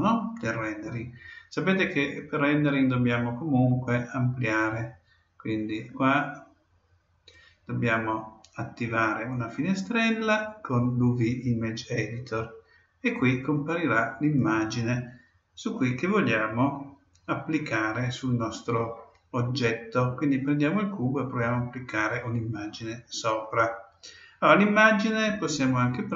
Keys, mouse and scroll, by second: 4.6-6.2 drag, 6.3 click, 9.3-11.1 drag, 13.1-14.9 drag, 26.0 click.